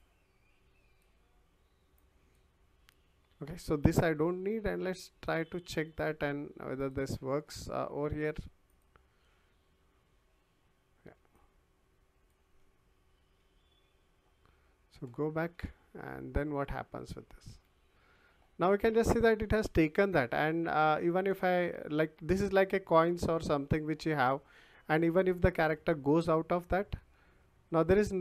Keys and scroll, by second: 11.1 w, 15.5 w, 19.6 w, 21.5 w, 23.1 w, 24.7 s, 25.7 w, 27.1 d, 27.7 w.